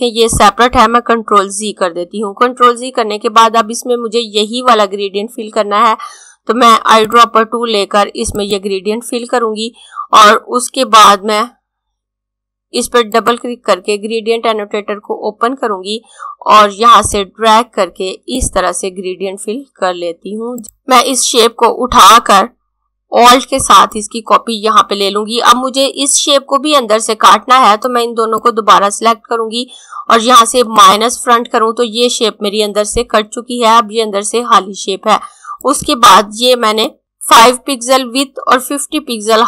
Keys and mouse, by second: 0.7 z, 5.9 click, 11.8 click, 15.7 click, 20.8 click, 27.7 click, 35.3 click.